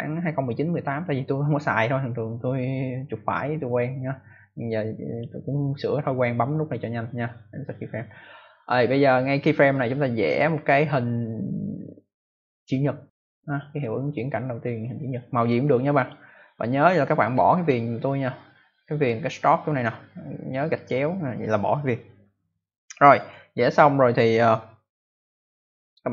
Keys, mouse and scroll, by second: 4.2 click, 12.5 click, 13.7 click, 17.2 click, 20.7 click, 21.6 click, 23.1 click, 25.7 click.